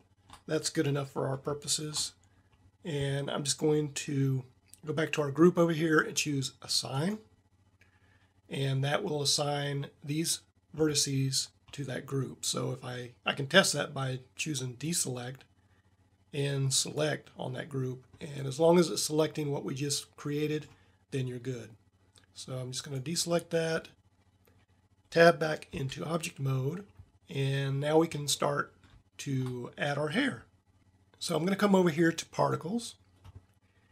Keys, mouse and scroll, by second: 0.0 middle click, 0.8 middle drag, 1.2 middle click, 18.5 middle click, 18.7 middle click, 19.1 middle click, 25.8 Tab.